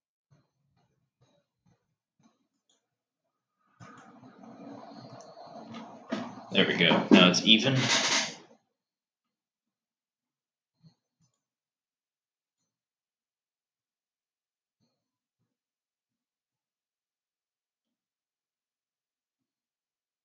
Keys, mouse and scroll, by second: 11.6 click, 12.9 click.